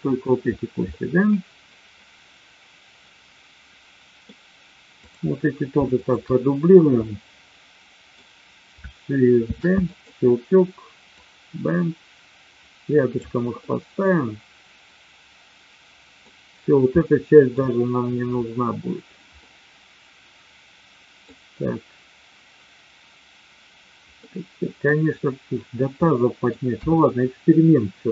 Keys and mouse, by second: 0.9-4.3 middle drag, 5.0 click, 5.9 shift+click, 7.1 middle click, 9.5 shift+d, 9.8 click, 11.1-13.1 drag, 13.5-16.3 middle drag, 16.9 middle click, 19.3-21.1 middle drag, 24.1 middle click, 26.0 middle click, 26.8 KP_1.